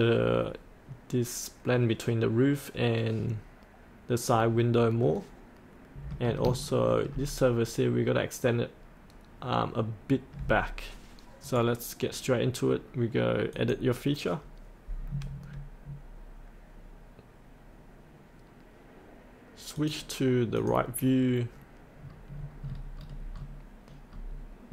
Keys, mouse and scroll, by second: 4.3-5.0 scroll up 1, 5.0 middle click, 6.6 shift+middle click, 11.4 right click, 13.5 click, 22.0-22.7 scroll down 1, 22.7-24.7 scroll down 1.